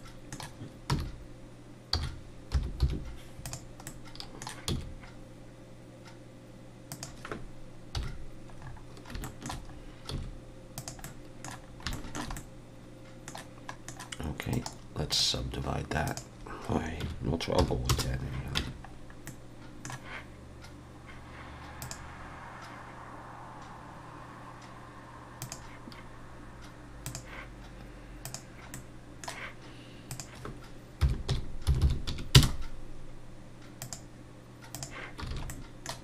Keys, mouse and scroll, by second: 0.9 r, 3.9 middle click, 4.7 s, 7.9 KP_1, 8.6-9.1 scroll up 4, 9.2 shift+middle click, 9.7-10.7 scroll up 2, 10.1 s, 11.0 middle click, 11.6 scroll down 2, 11.9 shift+middle click, 12.4 middle click, 13.7 middle click, 13.7 scroll up 1, 14.5 right click, 16.1 click, 18.6 Tab, 18.9-19.3 scroll down 2, 19.3 middle click, 21.8 click, 27.0 click, 28.7 middle click, 30.1 click, 31.8 0, 33.8 click, 35.3 alt+a, 35.5 middle click.